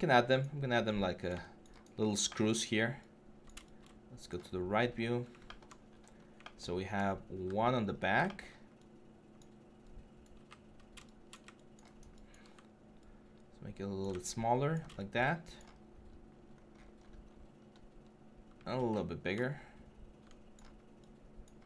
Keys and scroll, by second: 7.1-7.7 typing, 17.8-18.5 typing.